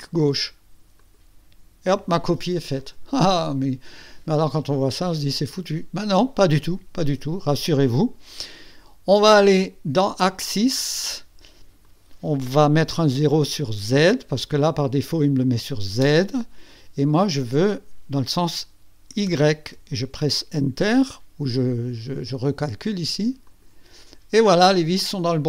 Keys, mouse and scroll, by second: 1.0 click, 10.0 click, 11.9 click, 16.0 KP_0, 17.2 click, 19.3 KP_1, 23.5 click.